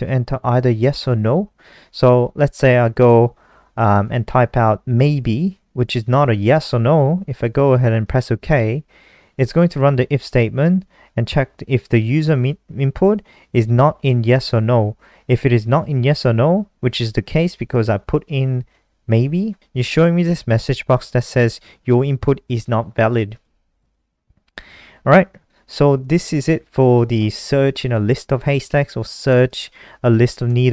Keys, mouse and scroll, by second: 5.3-6.5 typing, 9.3 typing, 9.9 click, 26.1-26.9 scroll down 1, 27.9 click, 29.4 Delete, 30.5 BackSpace.